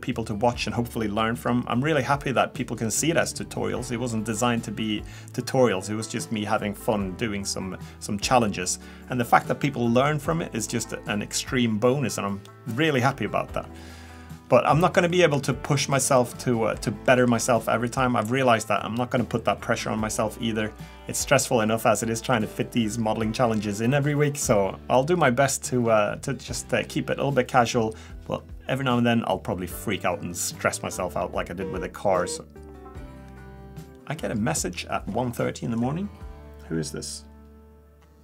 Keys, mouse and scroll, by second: 14.4 scroll down 1, 15.1 shift+middle click, 15.8-16.3 scroll up 1, 16.3 middle click, 17.0 shift+middle click, 18.0 middle click, 21.5 scroll up 1, 26.6 middle click, 26.6 scroll down 1.